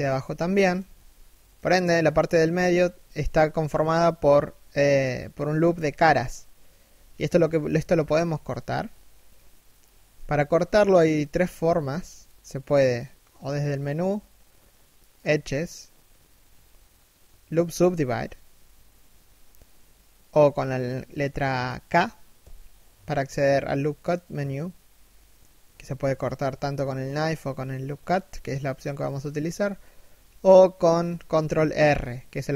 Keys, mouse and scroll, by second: 0.0 shift+middle click, 0.4 a, 0.8 middle click, 2.0 KP_3, 2.5 KP_1, 21.9 k, 31.2 ctrl+r.